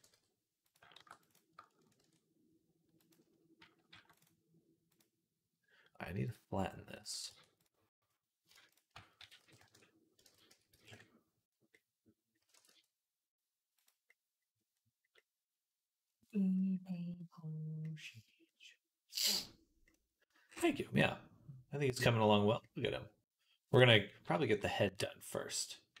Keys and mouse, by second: 0.8 ctrl+r, 1.8 ctrl+b, 3.7 ctrl+r, 6.7-9.0 drag, 7.1 b, 9.0 s, 10.0 ctrl+click, 10.1 ctrl+z, 10.3 s, 11.6-13.9 drag, 12.4 r, 13.9-16.8 middle drag, 16.9-22.6 middle drag, 22.7-26.0 middle drag.